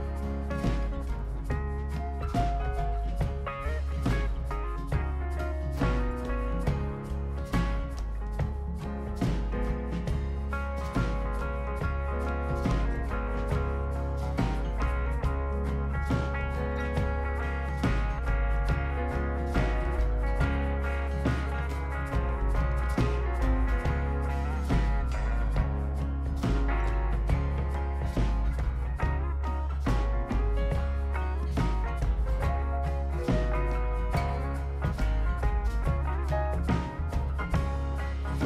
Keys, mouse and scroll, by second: 0.3-0.9 scroll down 2, 0.9-1.9 right drag, 3.1-4.1 drag, 4.5-5.4 scroll up 4, 5.6 click, 6.4 click, 7.3 ctrl+click, 9.5 click, 10.2 scroll down 3, 10.5 middle click, 10.8-11.1 right drag, 13.7 click, 15.3 click, 18.8 click, 20.0-21.0 scroll up 7, 21.8 click, 22.1 scroll down 3, 22.8 scroll down 2, 23.0-23.4 right drag, 24.2 ctrl+click, 25.3 ctrl+click, 25.6 scroll down 2, 25.9 click, 26.8 right click, 27.2 click, 27.6 right click, 28.4 middle click, 28.4-29.1 scroll up 2, 29.9 ctrl+click, 30.2 scroll down 2, 31.0 scroll down 2, 33.9 click, 35.2 2, 35.5 5, 36.9 click.